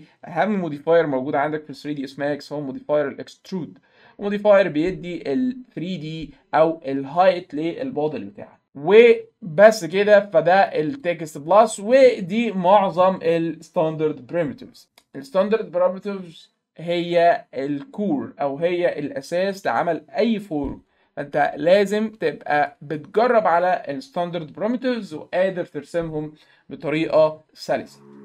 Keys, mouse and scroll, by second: 9.6 click, 11.0 click, 22.5 middle click, 22.7 middle click.